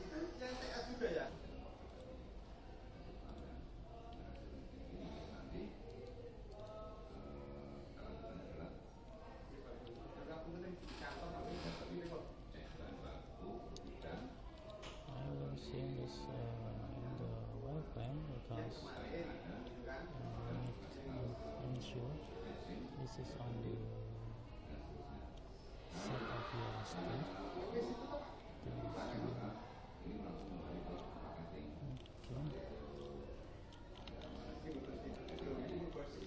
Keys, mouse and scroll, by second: 6.7 right click, 9.2-14.0 middle drag, 14.0-16.5 right drag, 16.5-17.9 middle drag, 18.1 click, 19.9-20.9 middle drag, 21.6 middle click, 22.9 middle click, 28.5-29.6 middle drag, 29.7-33.4 middle drag, 33.9-36.2 middle drag.